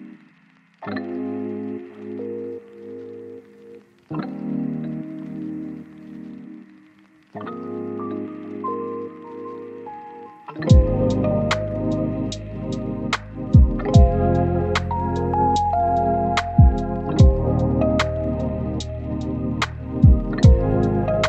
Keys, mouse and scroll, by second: 0.8 scroll down 1, 1.0 scroll up 1, 1.1 right click, 1.3-1.9 scroll down 1, 2.6 click, 2.9 scroll down 1, 3.1 right click, 3.9 click, 4.1 right click, 5.3 scroll down 1, 5.5 scroll up 1, 5.6 right click, 6.7 click, 7.1-7.4 scroll up 1, 7.4 right click, 7.6 scroll up 1, 8.0 click, 8.1 scroll down 1, 8.3 scroll up 1, 8.5 right click, 9.0 click, 9.2 right click, 9.7 click, 9.9 right click, 10.5 click, 11.7 right click, 11.8 scroll down 1, 12.0 scroll up 1, 12.2 right click, 12.7 click, 12.9 scroll up 1, 13.1 click, 14.4 scroll down 1, 14.6 scroll up 1, 14.8 right click, 15.0 click, 18.9 right click.